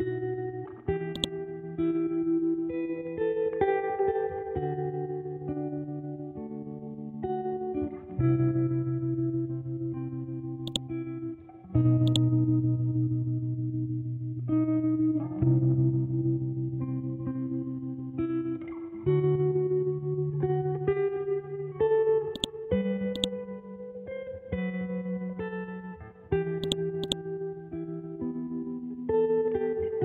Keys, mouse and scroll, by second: 0.7 b, 1.1 click, 1.4 scroll down 1, 4.4-4.8 scroll up 1, 4.8 scroll down 1, 5.3 scroll, 5.5-7.2 scroll up 1, 7.6 scroll down 1, 9.5-9.9 scroll down 1, 10.6 click, 11.4 scroll up 1, 12.0-13.4 drag, 13.4 scroll up 1, 14.6 ctrl+Home, 15.6 Up, 20.7 scroll down 1, 22.3 shift+click, 22.9 c, 23.1 click, 23.7-25.2 scroll up 1, 25.5 scroll down 1, 26.2 scroll up 1, 26.6 click, 27.7 ctrl+z, 29.8-30.0 scroll down 1.